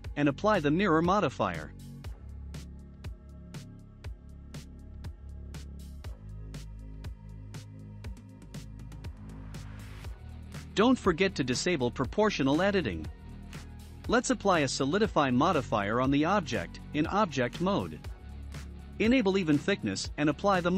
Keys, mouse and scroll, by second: 1.7-3.2 drag, 2.6 Tab, 3.2-6.9 middle drag, 3.7-4.1 scroll up 1, 5.1 scroll up 1, 6.9-8.4 drag, 10.7 click, 11.4-11.7 scroll down 1, 11.7 middle click, 12.5 Tab, 13.7 click, 16.1-20.7 drag.